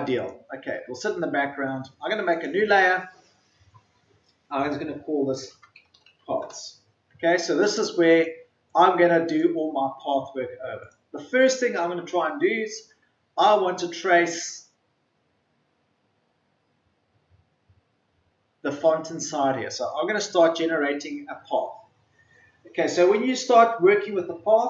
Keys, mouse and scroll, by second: 6.3 typing, 6.4 Return, 8.0 click, 11.3 scroll up 1, 13.2-17.0 ctrl+scroll up 1.